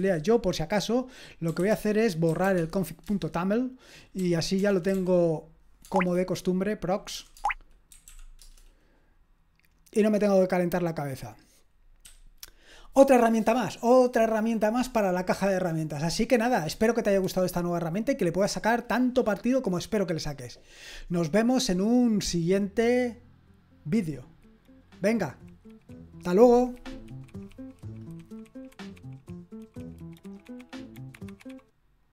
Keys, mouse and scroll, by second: 1.3-2.9 typing, 3.0 Return, 3.9-5.8 typing, 7.1-8.6 typing, 7.3 Tab, 12.0 q, 21.3 click, 32.0 click.